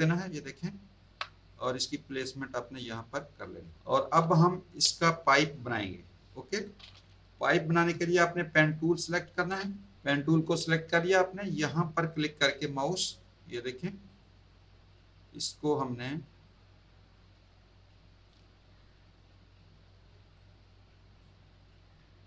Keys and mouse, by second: 1.4 click, 4.2 space, 4.3 click, 9.5 p, 14.1 click, 16.4 click, 20.4 click.